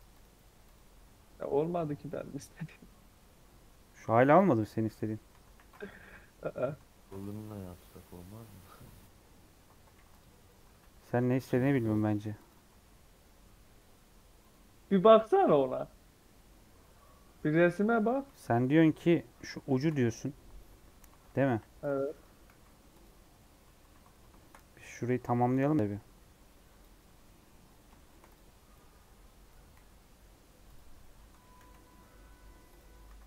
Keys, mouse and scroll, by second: 0.3 right click, 1.0 scroll up 2, 4.8 middle click, 5.4 ctrl+1, 6.1 Tab, 6.2 middle click, 6.5 scroll up 1, 6.9 ctrl+r, 9.2 Tab, 9.5 Tab, 9.8 ctrl+r, 10.7 ctrl+z, 10.9 ctrl+r, 12.6 Tab, 14.3-16.4 right drag, 16.4 Tab, 16.9-18.3 middle drag, 18.3 KP_1, 18.7 KP_3, 19.1-19.5 scroll up 2, 19.6 shift+middle click, 19.8 scroll up 2, 21.0 alt+z, 21.4 1, 21.7 click, 22.4 x, 23.2-23.7 scroll down 3, 23.4 Tab, 23.8 alt+z, 24.0-24.6 scroll up 4, 24.3 shift+middle click, 24.6 Tab, 24.9 3, 25.2 alt+z, 25.4 click, 27.6 scroll up 3, 27.9 shift+middle click, 28.2-29.7 drag, 29.7 x, 31.2 Tab, 31.5-31.9 alt+scroll down 2, 32.0 middle click, 32.7 click.